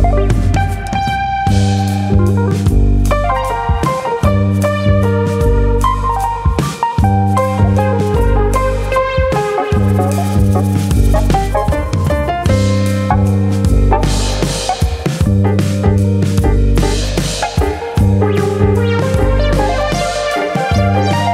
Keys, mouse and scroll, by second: 0.1 click, 0.9 click, 1.5 middle click, 3.0-3.9 scroll up 3, 3.2 middle click, 5.2 Tab, 5.7 click, 5.9 middle click, 6.5 click, 7.2 middle click, 8.0 alt+click, 8.3 middle click, 8.8 click, 10.8 click, 11.3 ctrl+click, 12.0 ctrl+click, 13.2 middle click, 13.6 middle click, 14.0 middle click, 14.2 Tab, 14.9 middle click, 14.9-15.4 scroll down 3, 15.2 shift+middle click, 15.4 middle click, 15.8 middle click, 16.7 KP_1, 17.6 click, 20.7 middle click.